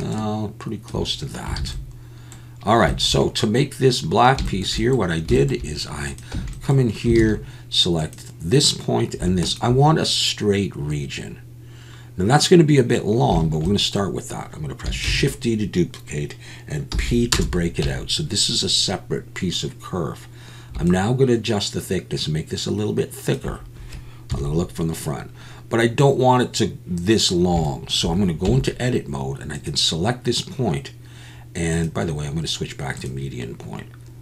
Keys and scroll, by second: 1.6 alt+a, 6.4 Tab, 7.2 alt+a, 15.1 shift+d, 16.9 p, 17.8 Tab, 24.3 KP_1, 28.5 Tab.